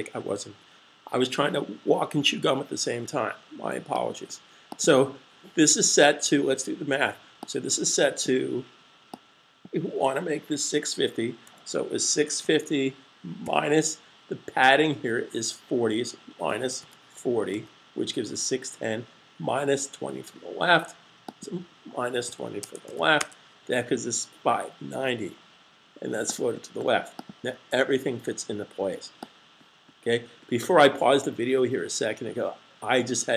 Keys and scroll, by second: 10.2-11.3 typing, 14.1 typing, 15.1-16.1 typing, 20.9-22.0 typing, 26.4 super+s.